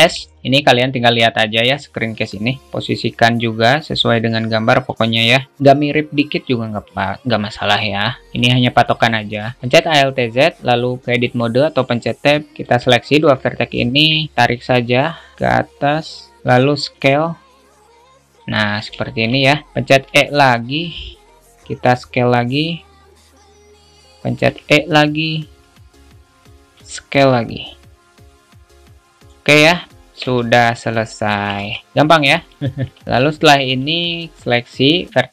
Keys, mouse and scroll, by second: 2.7 g, 7.7-8.5 drag, 9.5 shift+middle drag, 10.0 alt+z, 11.4 Tab, 12.6 click, 13.1 shift+middle click, 14.1 shift+middle click, 14.4 click, 16.6 shift+middle click, 19.3 alt+shift+middle click, 22.7-24.3 drag, 26.9 s, 30.2 shift+middle click, 30.8 alt+z, 30.8 middle click, 31.8 `, 33.5 shift+middle click, 34.4 click.